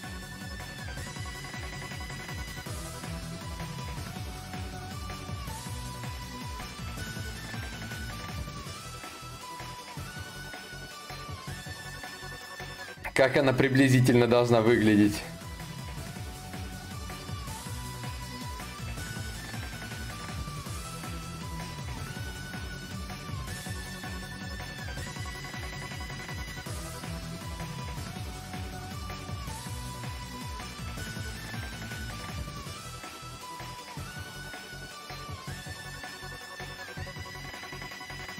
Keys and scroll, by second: 2.4-3.7 typing.